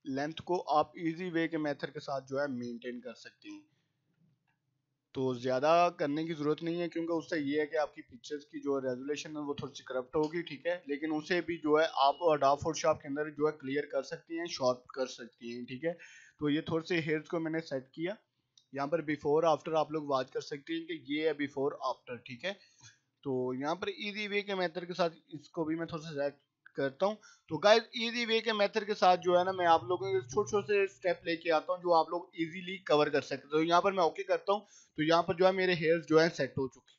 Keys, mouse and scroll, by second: 1.7 [, 2.5 click, 2.8-5.2 typing, 6.2-7.1 click, 7.0 [, 7.9-8.8 click, 8.7 [, 9.4-10.0 click, 9.9 [, 10.2 [, 10.4 [, 11.0-11.7 drag, 19.0-22.2 typing, 23.3 typing, 24.5-25.1 click, 25.2 ], 25.9 [, 26.6-27.2 click, 27.8 ], 28.0 ], 28.2 click, 29.7-30.8 drag, 33.6 click, 35.6 right click, 36.0 click.